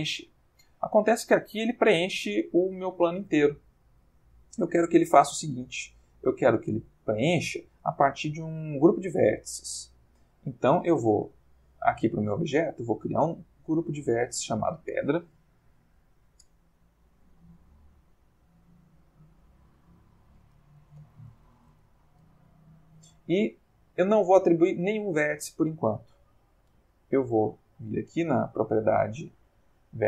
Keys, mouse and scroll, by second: 0.1-1.4 ctrl+shift+middle drag, 2.4 ctrl+middle click, 5.4 middle click, 11.3 click, 13.3 click, 14.2 click, 17.2 click, 17.9 click, 19.0 click, 19.7 ctrl+click, 20.9-21.5 typing, 21.6 shift+Return, 25.5-26.1 middle drag, 27.0 click, 27.7 middle click, 28.8 middle click.